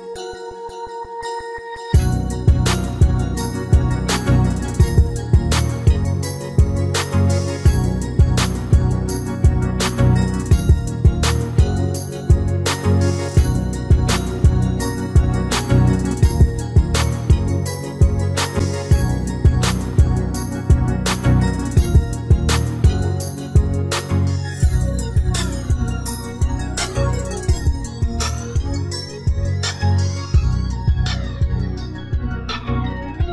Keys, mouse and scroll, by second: 0.8 r, 7.5 g, 12.3-14.4 middle drag, 14.4 s, 18.6 middle click, 19.4-27.5 middle drag, 27.5 s, 31.6 r.